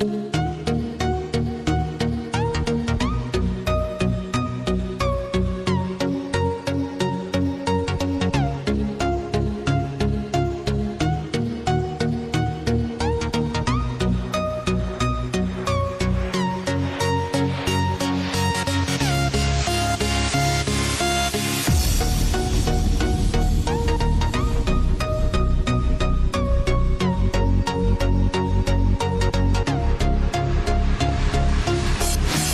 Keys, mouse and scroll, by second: 1.8 click, 3.5 s, 7.1 click, 9.0 click, 10.5 click, 12.6 click, 13.4 click, 16.8 click, 17.6 click, 17.9-21.6 drag, 23.0 click, 31.7-32.5 drag.